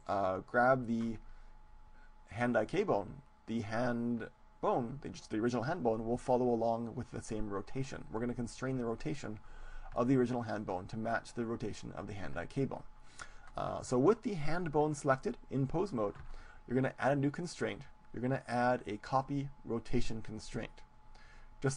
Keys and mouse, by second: 3.8-5.5 right drag, 17.6-19.8 drag.